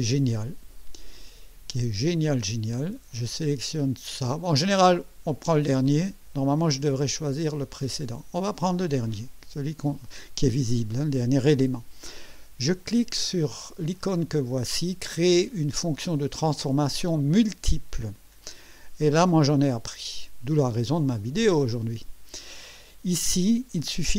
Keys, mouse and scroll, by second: 8.8 click, 21.1 click.